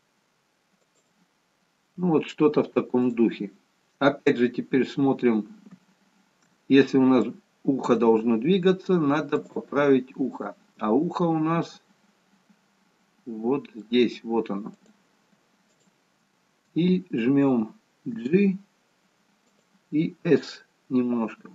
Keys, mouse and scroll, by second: 5.5-6.5 scroll up 1, 7.5 shift+middle click, 7.5-8.0 scroll up 1, 9.5 click, 10.5 middle click, 14.8 click, 15.7 shift+click, 18.2 g.